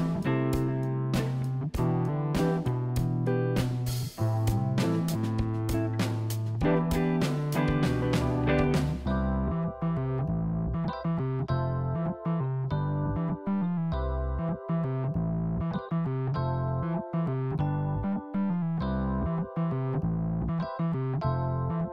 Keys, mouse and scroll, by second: 3.9 g, 9.7 click, 10.1-11.7 middle drag, 14.4 click, 14.9-16.6 middle drag, 18.1 middle click, 18.9 click, 19.3 middle click, 20.0 click, 20.6-21.7 middle drag, 21.7 Tab.